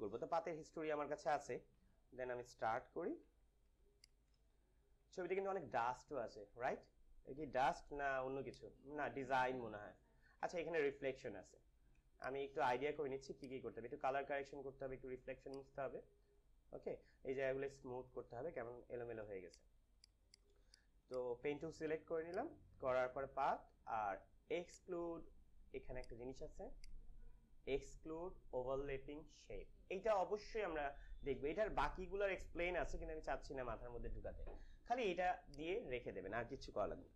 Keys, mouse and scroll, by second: 1.7 f, 2.6 ctrl+=, 3.7 space, 3.9 click, 4.2 space, 4.8 ctrl+=, 5.6 space, 8.2 space, 8.4 click, 8.7 space, 12.1 click, 13.3 click, 15.3 click, 15.7 space, 19.2 space, 19.3 click, 19.7 space, 19.9 click, 20.2 click, 20.7 space, 20.9 click, 21.1 space, 22.1 click, 24.5 click, 35.4 click.